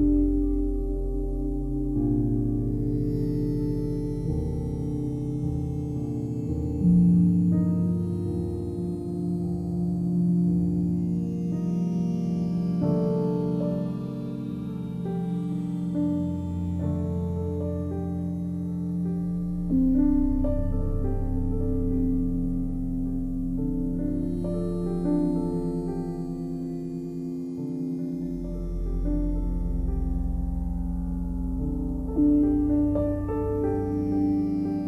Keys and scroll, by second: 16.4 ctrl+t, 20.8 Return, 24.5 ctrl+t.